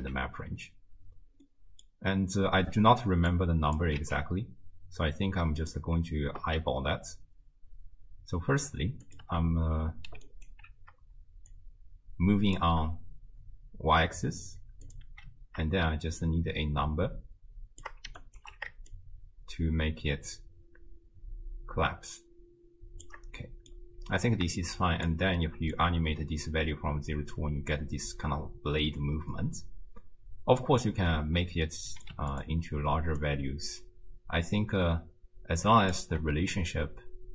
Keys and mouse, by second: 0.0 x, 1.5 middle click, 3.3 click, 4.0 shift+d, 6.4 x, 9.0 click, 9.3 m, 10.3 ctrl+alt+click, 11.5-12.6 shift+drag, 15.1 m, 16.2-17.8 shift+drag, 18.2 ctrl+alt+click, 18.9-23.1 shift+drag, 23.4 middle click, 24.8 shift+click, 25.7-30.7 drag, 31.9 click, 33.2-35.9 shift+drag.